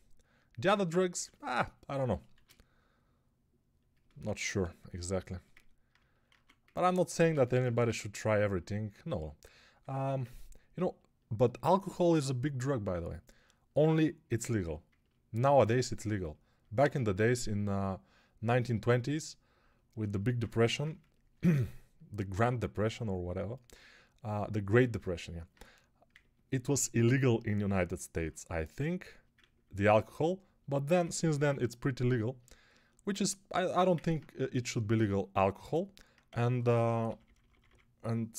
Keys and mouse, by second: 2.2 shift+r, 4.1 ctrl+r, 6.1 alt+1, 7.2 ctrl+z, 7.7 1, 20.4 g, 36.1-37.5 typing.